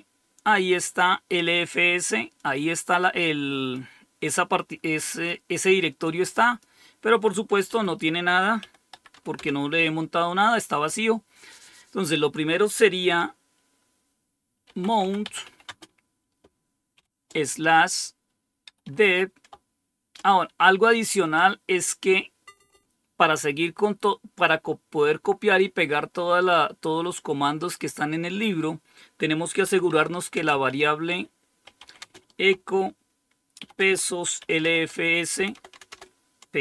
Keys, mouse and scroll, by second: 2.3-3.7 drag, 5.0 click, 6.0 click, 8.5-9.5 typing, 14.3-16.9 typing, 18.3-19.4 typing, 21.3-22.6 typing, 29.6-32.2 typing, 33.5-35.8 typing.